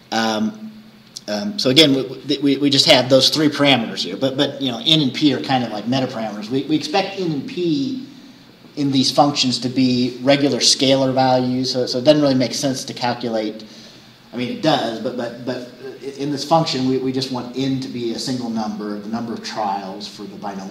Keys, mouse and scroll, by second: 0.5 scroll up 2.